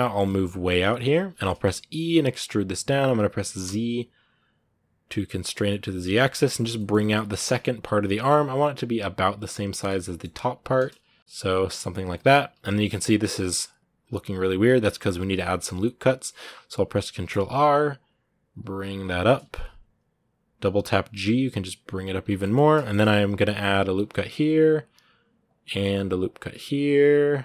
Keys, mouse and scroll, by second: 1.5 e, 5.5 middle click, 6.1 scroll down 1, 6.2 middle click, 6.7 scroll up 1, 7.0 g, 8.0-10.0 middle drag, 10.0 scroll up 2, 10.3 g, 11.2 middle click, 11.7 scroll up 1, 11.9 middle click, 12.4 scroll up 1, 13.0-14.2 shift+middle drag, 14.2-14.6 scroll up 2, 14.6 scroll down 1, 15.4 ctrl+r, 18.5 scroll up 8, 19.3 g, 22.0 scroll down 2, 22.2 middle click, 22.8 scroll up 2, 23.8 ctrl+r, 25.7 ctrl+r.